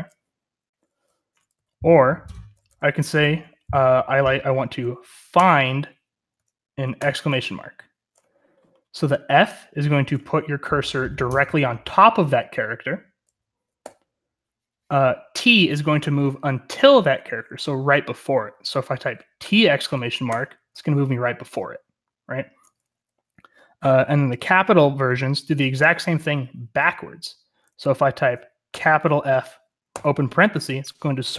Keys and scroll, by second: 0.9-2.9 typing, 5.3 typing, 6.9 typing, 13.8 0, 19.3-20.7 typing, 28.6-30.3 typing.